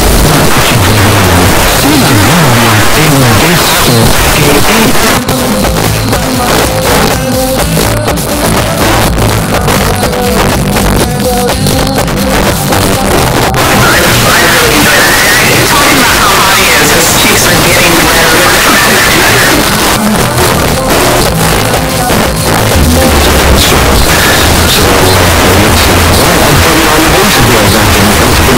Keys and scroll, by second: 5.0 Page_Down, 19.6 Page_Down, 24.8-25.6 typing.